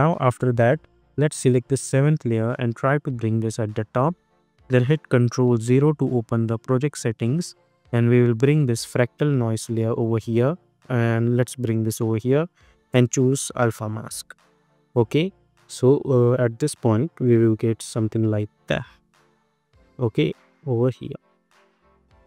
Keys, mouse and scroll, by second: 1.7-5.8 drag, 8.3-16.0 drag, 16.0 space, 18.7 click, 19.5 space.